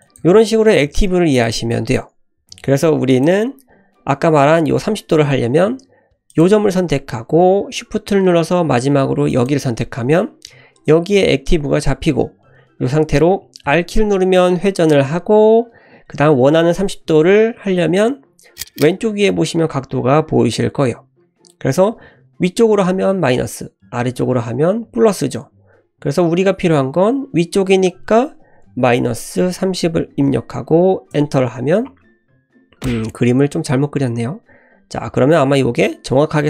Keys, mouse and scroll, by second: 0.2 ctrl+z, 1.4 click, 1.7 click, 2.4 Delete, 6.3 click, 9.3 shift+click, 9.3 shift+l, 13.6 r.